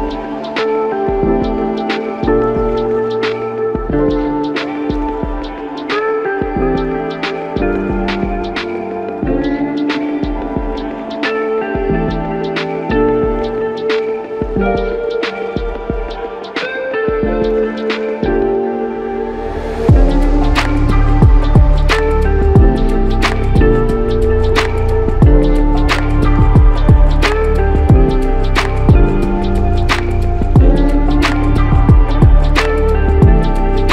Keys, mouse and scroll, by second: 1.2 double click, 6.8 double click, 9.6 double click, 13.5 double click, 23.3 double click, 31.5 alt+click, 33.8 alt+click.